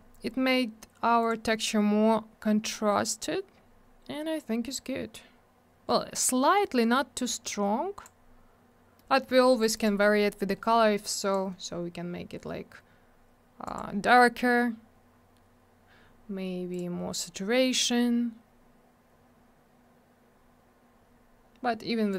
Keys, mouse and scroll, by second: 0.0 scroll down 1, 1.2 click, 1.3 click, 2.5-2.8 scroll up 1, 3.5-4.0 scroll down 1, 7.4 click, 9.0 middle click, 9.1 middle click, 9.3 middle click, 9.4 double middle click, 9.6 click, 9.7 click, 9.7 click, 9.8 double click, 11.2 click, 11.3 click, 13.6 click, 13.7 click, 15.2-16.4 scroll up 1, 16.7 click, 16.8 click, 18.4-19.0 scroll up 1, 19.4-21.5 scroll down 1, 22.1 click.